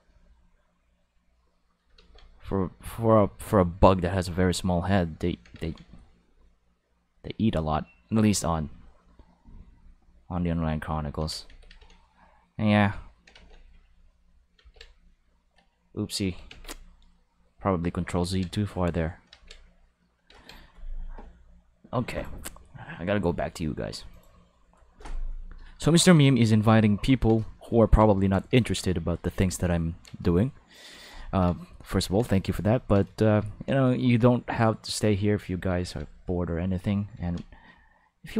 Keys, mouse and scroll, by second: 2.2-3.5 drag, 6.1-7.3 drag, 9.0 click, 10.2 click, 11.7 ctrl+z, 12.4 click, 13.6 click, 14.7-15.2 drag, 16.1 click, 16.5 ctrl+s, 17.0 click, 18.5 click, 19.5 click, 22.1 click, 24.1 click, 30.4 shift+middle click, 31.2 ctrl+middle click, 31.6 shift+middle click, 31.9 ctrl+middle click, 32.4 shift+middle click, 34.9 click, 35.8 ctrl+z, 36.1 click, 37.1 ctrl+z, 37.6 click.